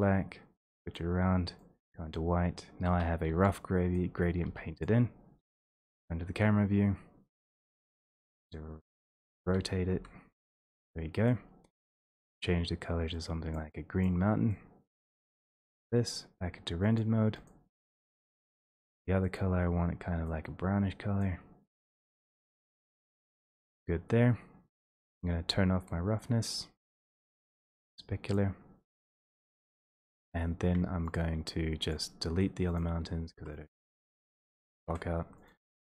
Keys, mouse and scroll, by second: 1.0 click, 2.2 click, 2.9-3.3 typing, 4.0 click, 4.5 typing, 4.9 click, 7.6-8.3 typing, 8.6 click, 10.0 typing, 12.1 click, 12.1 e, 13.5 click, 14.0 click, 15.0 click, 15.7 click, 17.0 click, 17.7 click, 19.4 click, 21.7 click, 23.6 click, 24.8 click, 32.9 click, 33.4 Delete, 33.8 click, 34.0 Delete, 34.2 click, 34.8 click, 35.6 click.